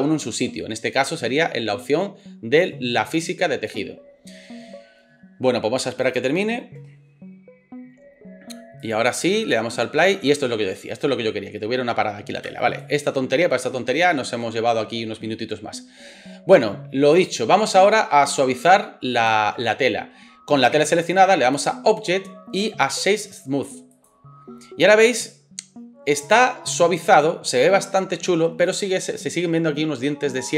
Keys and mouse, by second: 12.4 space.